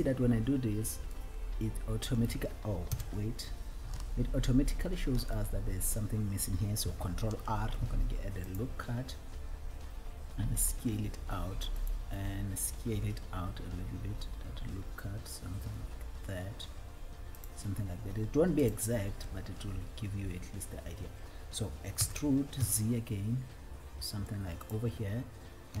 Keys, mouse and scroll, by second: 0.0 click, 0.8 scroll up 2, 1.6-2.6 alt+middle drag, 3.1 KP_1, 4.3-5.7 shift+middle drag, 7.5 ctrl+r, 17.8 click, 17.8 s, 18.8 alt+click, 20.0 scroll down 1, 22.2 e, 23.1 z.